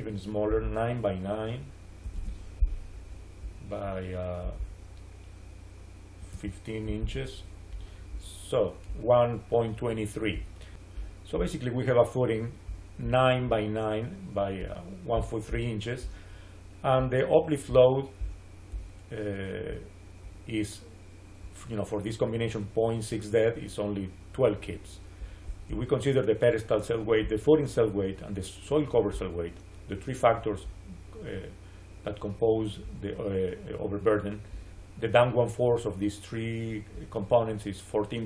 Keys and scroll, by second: 1.9 9, 2.1 Return, 6.2 1, 6.7 5, 6.9 Return.